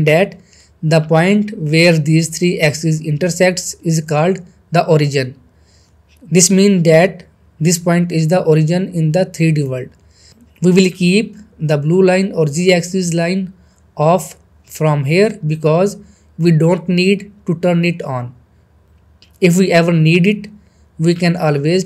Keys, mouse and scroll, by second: 0.3-0.9 middle click, 1.0 scroll up 1, 3.8-5.4 scroll up 1, 5.4 click, 5.9-6.3 scroll down 1, 8.2-13.8 middle drag, 15.6 click, 17.5-18.2 middle click, 18.7 click, 18.9-19.3 scroll down 2, 19.6-20.2 middle click, 20.1 scroll up 1, 20.5 middle click, 20.9-21.5 scroll up 1.